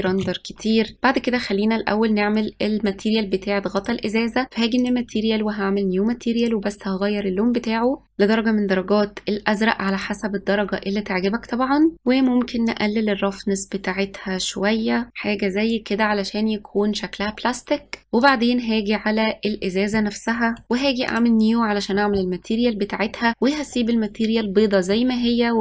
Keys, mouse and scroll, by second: 0.2 ctrl+s, 0.9 click, 3.8 click, 4.8-6.7 drag, 12.8-15.1 drag, 18.3 click, 21.1-24.0 drag, 24.9-25.6 scroll down 10.